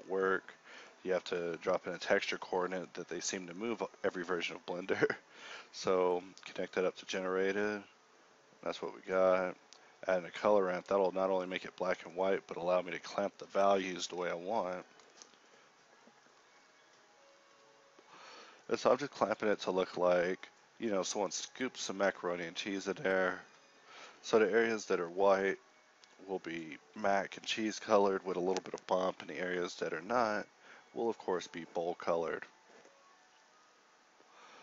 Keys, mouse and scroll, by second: 6.9 g, 7.4 shift+a, 9.8 g, 19.5 z, 19.7 Tab, 19.7 z, 21.4 Tab, 22.6 Tab, 23.2 ctrl+r, 24.9 ctrl+r, 24.9 a, 25.2 a, 25.2 u, 25.8 u, 26.9 Tab, 32.9 z, 33.1 Tab, 34.3 ctrl+e.